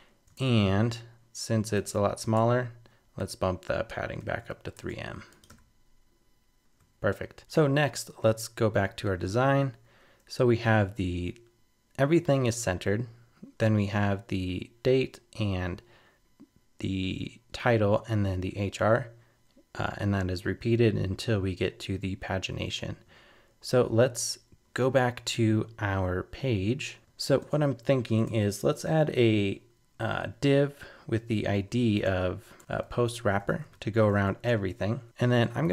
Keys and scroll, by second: 0.4 super+Tab, 4.5 super+s, 4.7 super+Tab, 5.5 super+r, 7.4 super+Tab.